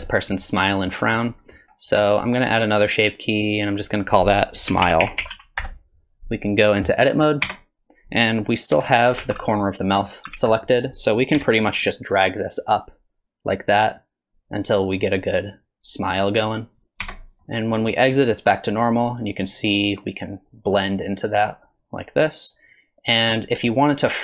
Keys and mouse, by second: 0.9 middle click, 3.0 click, 3.8 click, 4.0-6.1 drag, 7.5 Tab, 8.7 KP_1, 9.2 alt+z, 9.6 middle click, 10.4 alt+z, 10.6 middle click, 11.4 KP_1, 12.7-14.3 drag, 15.3-16.8 drag, 17.0 Tab, 17.4 middle click, 19.5-24.2 drag.